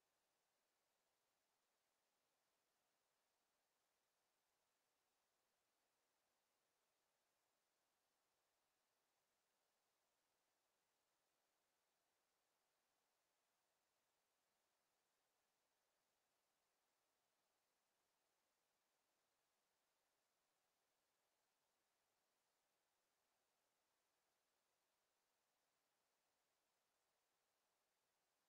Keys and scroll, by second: 19.2 6, 19.6 0, 20.0 Return.